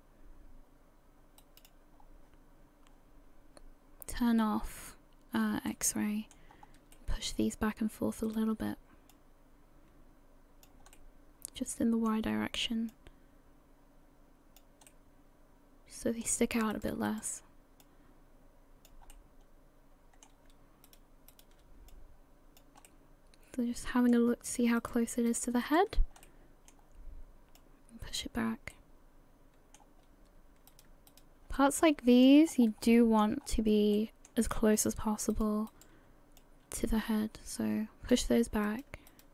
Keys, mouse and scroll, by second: 2.0-2.5 scroll down 3, 5.7 middle click, 6.5 scroll up 3, 6.9 shift+middle click, 8.3 shift+right click, 9.1 click, 10.9 middle click, 12.9 click, 14.9 middle click, 16.7 right click, 17.1 shift+right click, 17.8 click, 19.1 middle click, 20.9 shift+right click, 21.3 shift+right click, 21.9 click, 22.9 middle click, 24.5 right click, 24.8 shift+right click, 25.3 right click, 25.6 shift+right click, 26.2 middle click, 27.6 click, 28.5 scroll down 1, 28.7 middle click, 30.7 right click, 31.1 shift+right click, 31.6 middle click, 32.5 scroll up 3, 32.9 shift+middle click, 33.4-33.8 scroll up 3, 34.0 shift+middle click, 34.7-35.3 scroll up 2, 35.3 shift+right click, 35.7 shift+right click, 36.4 click, 38.7 right click, 39.1 shift+right click.